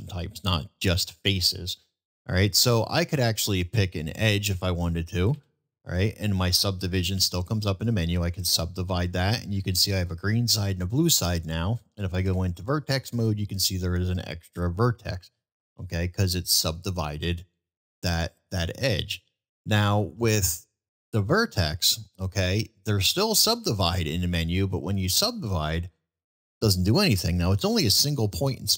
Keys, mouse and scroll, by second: 0.9 middle click, 2.6-3.1 middle drag, 8.4-9.3 middle drag, 15.5 1, 15.7 ctrl+z, 18.4-18.9 middle drag, 19.7 1, 20.2 middle click, 21.1-21.5 middle drag, 21.9 shift+middle drag, 22.5 middle drag.